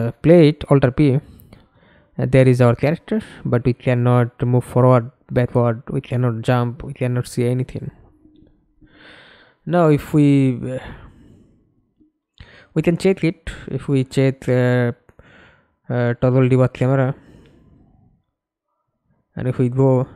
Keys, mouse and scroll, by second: 0.2 w, 0.7 w, 1.5 a, 1.8 d, 6.2-10.3 typing, 12.4-13.8 typing, 14.4 Up, 14.9 Return, 17.1-18.7 typing.